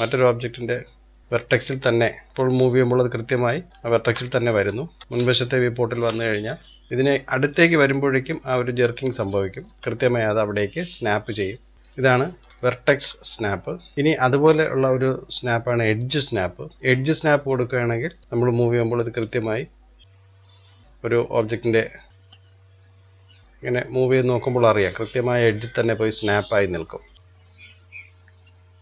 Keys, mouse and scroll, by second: 0.3 click, 2.3-4.3 middle drag, 4.3-5.3 scroll up 4, 5.3-6.9 shift+middle drag, 6.9 click, 9.3-10.9 shift+middle drag, 10.9 click, 12.5 scroll down 2, 12.7-13.9 shift+middle drag, 13.9-14.5 scroll down 2, 14.5-17.7 drag, 18.7 click, 20.9-21.7 scroll down 1, 21.7 click, 27.2 click.